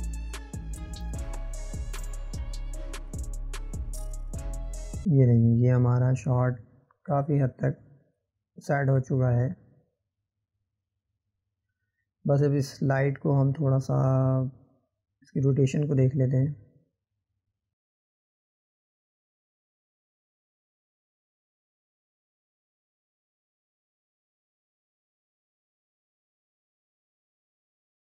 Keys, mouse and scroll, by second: 1.1-11.3 drag, 12.2 scroll up 3, 12.7-13.3 middle drag, 13.3 scroll down 1, 14.0 click, 14.8 click, 17.7-18.8 drag, 18.8 scroll down 1, 18.9-20.1 middle drag, 20.1-21.1 drag, 25.9 middle click, 26.7 click.